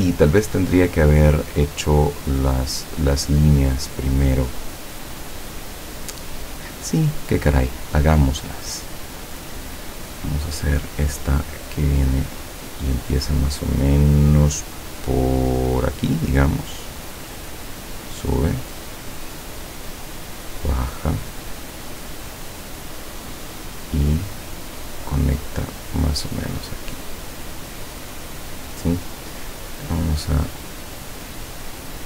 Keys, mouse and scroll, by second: 0.8 click, 1.6-2.0 scroll up 2, 2.7 scroll up 2, 3.2-4.1 scroll down 4, 4.5-4.8 scroll up 2, 5.0-5.3 scroll down 2, 5.9 scroll down 2, 6.3 scroll up 2, 7.3 click, 9.2 click, 17.4 click, 18.6-19.9 drag, 20.4 click, 22.6-24.2 drag, 26.3 click, 28.4 click, 31.1-32.0 drag.